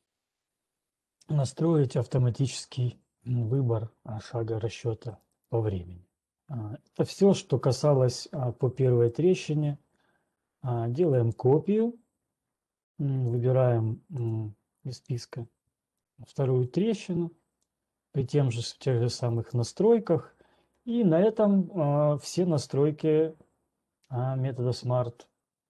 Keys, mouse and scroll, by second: 3.8 click, 5.5 click, 9.8 right click, 11.3 click, 14.8 click, 16.3 click, 17.0 ctrl+1, 17.3 click, 18.9 click, 20.1 right click.